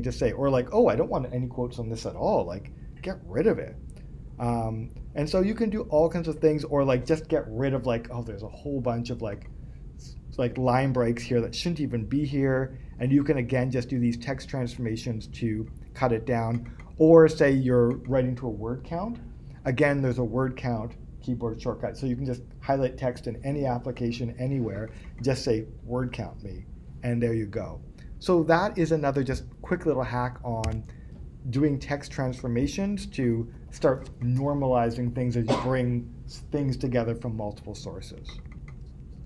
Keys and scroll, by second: 39.2 super+Tab.